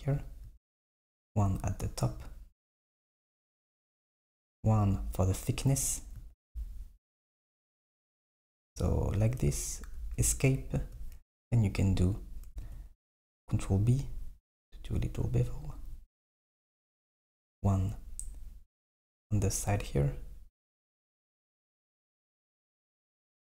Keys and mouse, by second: 0.6 r, 6.4 r, 12.7 ctrl+b, 17.1 r.